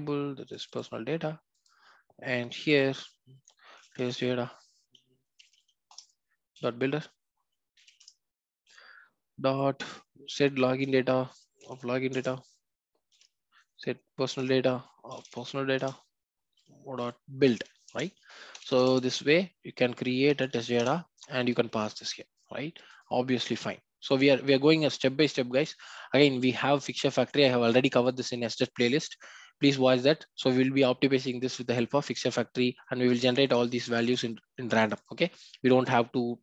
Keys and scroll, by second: 5.9 Return, 10.6 Return, 13.4 Return, 14.2 Return, 16.8 Return, 17.9 Return, 18.6 alt+Return, 20.8 Return.